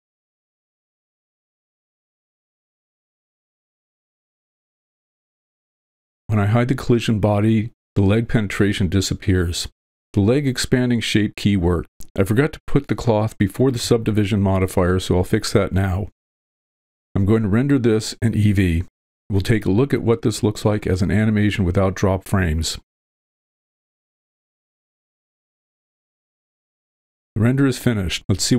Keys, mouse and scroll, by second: 4.5 space, 6.2 click, 8.8 click, 10.2-14.8 drag, 15.5-16.5 drag, 22.9-28.1 drag.